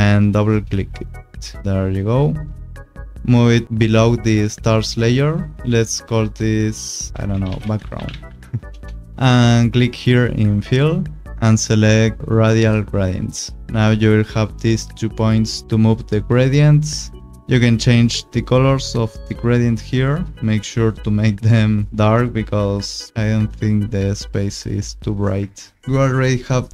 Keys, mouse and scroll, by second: 0.3 click, 1.8 click, 5.0 click, 6.2 Return, 7.1-8.7 typing, 10.5 click, 12.2 click, 13.2 click, 14.8 click, 17.4 click, 18.9 click, 20.1 click, 21.9 click, 24.5 click, 25.8 scroll, 25.8 u.